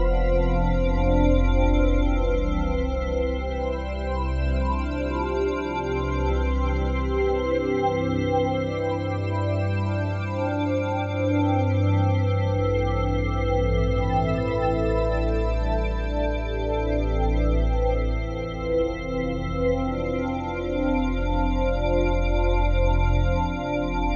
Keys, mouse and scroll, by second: 0.0-2.7 drag, 5.2-10.2 drag, 10.2-11.5 typing, 10.5 Return, 16.9-18.1 typing, 19.5 Return, 20.0-20.8 typing, 21.3 click.